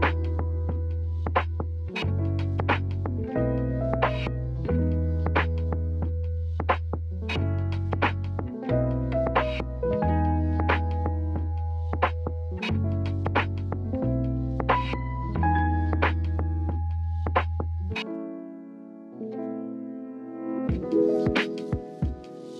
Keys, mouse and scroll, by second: 4.1-6.1 drag, 6.1 ctrl+r, 8.9-10.0 middle drag, 10.0 KP_3, 11.6-14.8 drag, 14.8 KP_1, 17.3-21.8 middle drag, 21.8 alt+z.